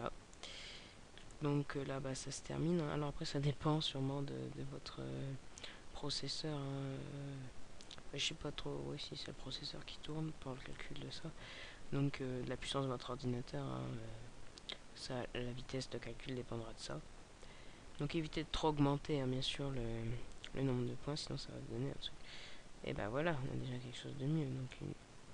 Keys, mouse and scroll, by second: 24.5 click.